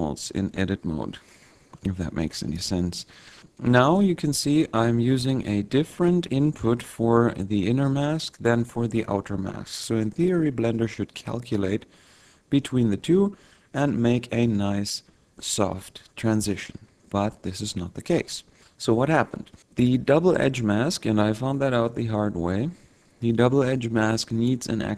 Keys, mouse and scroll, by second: 1.4 click, 3.5 click, 9.1 click, 11.1 click, 19.6 click.